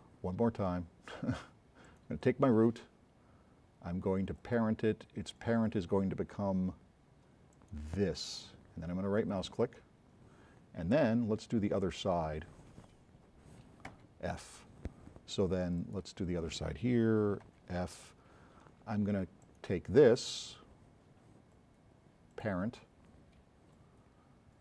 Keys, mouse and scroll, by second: 1.9 middle click, 4.4 click, 7.6 middle click, 9.3 right click, 11.8 click, 14.0 f, 15.8 click, 17.5 f, 19.5 middle click.